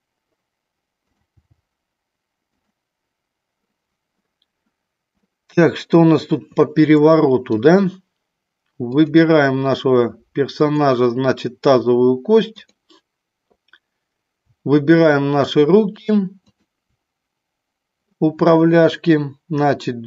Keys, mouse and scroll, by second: 1.1 click, 1.4 g, 2.7 click, 5.3-7.5 middle drag, 8.9 click, 10.5-11.6 drag, 12.5 click, 14.9 shift+click, 16.4-17.7 shift+drag.